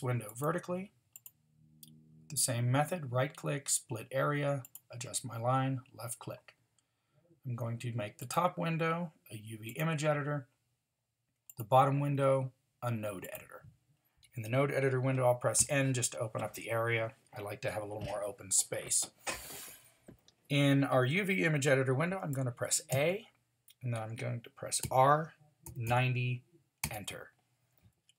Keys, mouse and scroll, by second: 15.6 n, 22.9 a, 24.8 r.